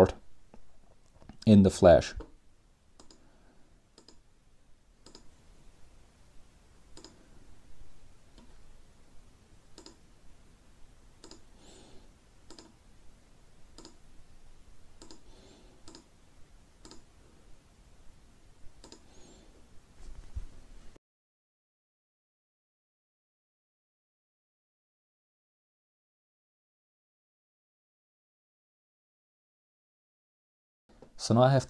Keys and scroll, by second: 3.1-3.8 typing, 4.7 Up, 4.9 Up, 5.2 Up, 6.1 Return, 10.9 Up, 11.2 Left, 11.3 Left, 11.5 Left, 11.6 Left, 12.0 Right, 12.3 Left, 12.5 typing, 13.2 Return, 18.7-27.6 typing, 27.6 Return, 29.9 Escape, 29.9-30.9 typing.